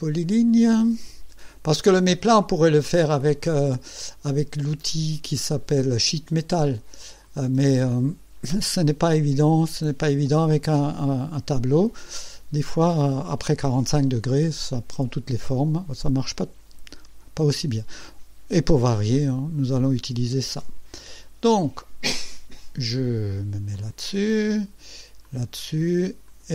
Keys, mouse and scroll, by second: 0.0 click, 4.8 click, 7.2 click, 20.6 click, 23.7 click, 25.2 click, 25.6 middle click, 26.3 click.